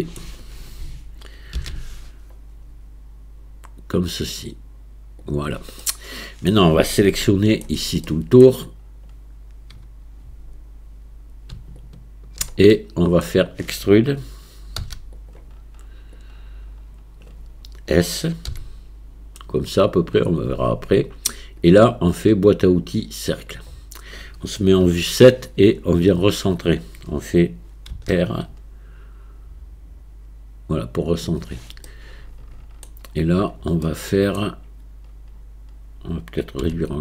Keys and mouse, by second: 0.0 middle click, 1.6 ctrl+b, 5.9 click, 5.9 right click, 7.3 shift+click, 8.1 click, 8.1 right click, 11.8 alt+click, 12.7 middle click, 14.8 e, 16.2-17.3 drag, 18.5 s, 21.6-23.5 drag, 24.9 KP_7, 31.9-32.9 middle drag, 33.9 middle click, 36.6 s.